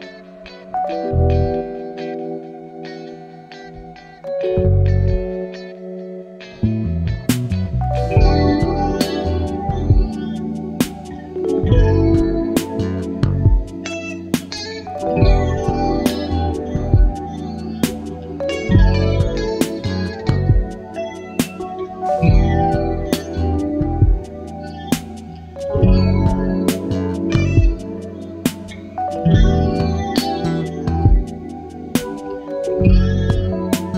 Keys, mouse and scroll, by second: 1.0-3.4 drag, 3.7-5.4 ctrl+drag, 5.5-6.0 ctrl+scroll up 2, 7.0-8.5 ctrl+shift+drag, 8.7-11.8 ctrl+shift+drag, 12.7 ctrl+d, 13.6-15.0 ctrl+drag, 16.1 ctrl+d, 18.5 shift+click, 19.8 ctrl+d, 21.0 shift+click, 22.1 ctrl+KP_Add, 24.0 click, 25.1-27.0 drag, 27.8 click, 28.4 click, 30.5 click, 32.3 ctrl+z, 33.2 click.